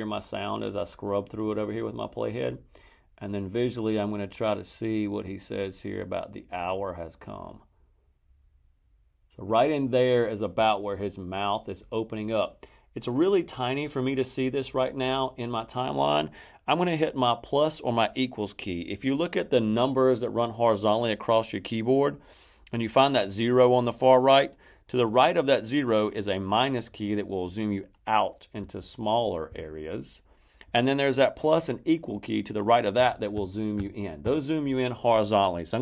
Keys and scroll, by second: 28.5 -, 32.9 =.